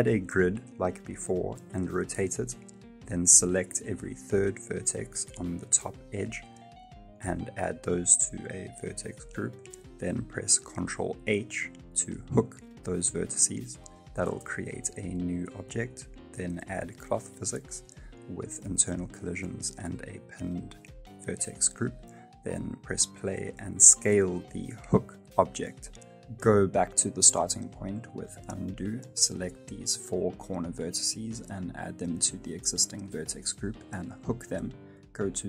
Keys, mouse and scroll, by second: 0.9 scroll up 5, 1.1 middle click, 1.3 Tab, 1.5 r, 2.1 scroll down 1, 2.2 middle click, 7.0 ctrl+shift+KP_Add, 8.5 click, 9.4 click, 10.6 click, 10.6 middle click, 11.2 shift+middle click, 14.3 ctrl+h, 14.3 middle click, 15.6 click, 16.2 click, 16.4-17.2 scroll down 31, 17.5 click, 17.5-18.0 scroll up 2, 18.4-19.2 scroll down 5, 19.2 click, 19.2-19.6 scroll down 3, 20.0 middle click, 21.1 Tab, 21.4 space, 22.2 s, 26.0 space, 26.3 ctrl+z, 27.1 middle click, 27.8 right click, 28.1 Tab, 28.4 middle click, 30.0 Tab, 30.0 middle click, 30.0 click, 30.4 click, 31.7 click, 32.5 ctrl+h, 33.8 ctrl+h, 33.8 click, 34.8 click.